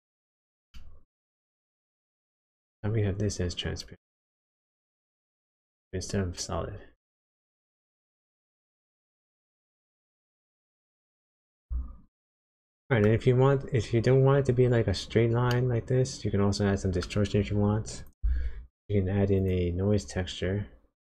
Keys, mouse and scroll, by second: 0.7 shift+middle click, 1.9 shift+middle click, 3.8 click, 9.7 middle click, 12.0-12.7 scroll down 3, 12.7 middle click, 14.7-15.4 scroll down 2, 15.5 middle click, 17.9 click, 18.2 shift+a.